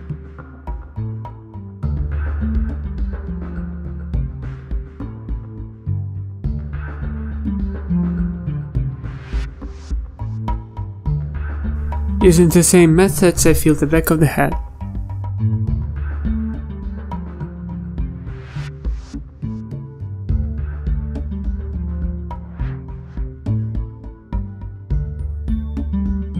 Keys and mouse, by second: 0.5 click, 0.8 ctrl+z, 3.0 ctrl+s, 3.9 alt+h, 4.1-6.0 typing, 5.3 ctrl+z, 5.6 ctrl+KP_Add, 5.9 ctrl+KP_Add, 6.8 ctrl+z, 6.9 ctrl+z, 8.4 ctrl+s, 10.7 middle drag, 11.5 click, 13.0 ctrl+s, 13.8 a, 13.9 a, 14.1 a, 14.1 h, 17.3 ctrl+z, 17.6 ctrl+z, 18.6 z, 19.2 z, 19.7 ctrl+z, 19.8 ctrl+z, 20.4 ctrl+z, 20.7 ctrl+z, 20.9-23.5 typing, 24.8 click.